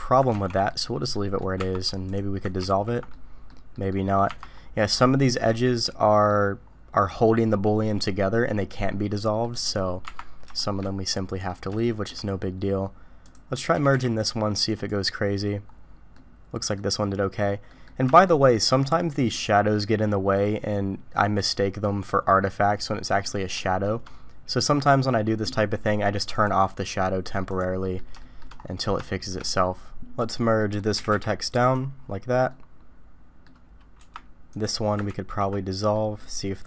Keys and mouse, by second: 0.4 ctrl+z, 0.7 click, 1.1 click, 1.6 Tab, 2.7 ctrl+x, 3.1 click, 3.7 click, 4.3 Tab, 5.9 click, 9.4 middle click, 10.0 Tab, 10.6 shift+middle drag, 11.1 middle click, 11.8 shift+middle click, 13.2 click, 13.7 g, 16.1 click, 17.7 middle click, 18.2 shift+middle click, 19.0 middle click, 20.4-21.8 middle drag, 22.8 middle click, 23.6 shift+middle click, 26.3-27.6 drag, 27.8 click, 28.2 shift+middle click, 29.0 shift+middle click, 30.2 click, 30.6 click, 30.9 g, 32.5 click, 34.5 Tab, 34.5 click, 35.1 ctrl+x, 35.9 drag.